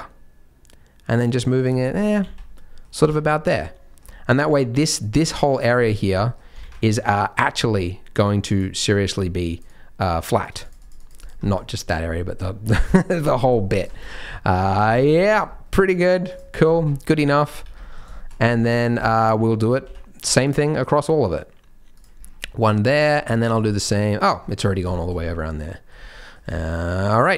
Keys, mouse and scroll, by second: 1.9 middle click, 2.2 z, 2.5 middle click, 3.0 Tab, 3.2 middle click, 5.0 click, 6.1 middle click, 6.6 ctrl+z, 7.0 click, 8.1 click, 9.1 click, 9.6 click, 10.4 click, 10.6 click, 10.8 click, 11.0 click, 11.1 click, 11.4 middle click, 12.6 d, 13.8 right click, 13.8 d, 13.9 Tab, 14.1 scroll down 4, 14.2 middle click, 14.6 Tab, 14.8 scroll down 2, 15.1 shift+middle click, 15.4 scroll up 2, 15.6 middle click, 16.2 click, 16.5 scroll down 2, 16.7 shift+middle click, 16.8-18.6 scroll up 7, 17.3 middle click, 17.6 Tab, 17.7 middle click, 18.1 shift+middle click, 18.6 middle click, 19.0 shift+middle click, 19.2-19.8 scroll up 2, 19.8 ctrl+r, 22.1-22.8 scroll down 5, 22.8 middle click, 23.3 shift+middle click, 23.6 middle click, 24.4-24.9 scroll down 4, 24.9 shift+middle click, 25.7 middle click, 26.1 middle click, 26.2 shift+middle click, 26.6 shift+middle click, 27.1 shift+middle click.